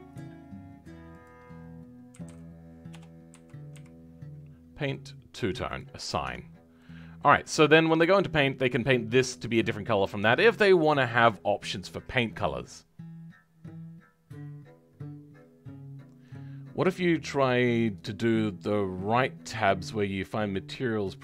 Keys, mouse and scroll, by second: 6.4-6.7 scroll down 2, 6.7 middle click, 7.4-7.7 scroll up 2, 7.7-21.2 middle drag.